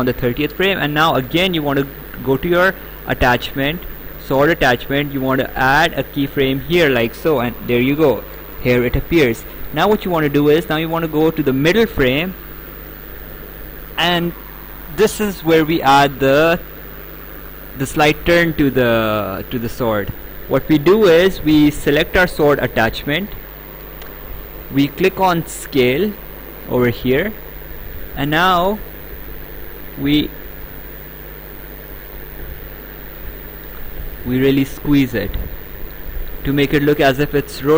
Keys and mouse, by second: 6.1 click, 11.5 click, 12.9 right click, 18.5 right click, 22.0 click, 25.9 click, 29.3 click.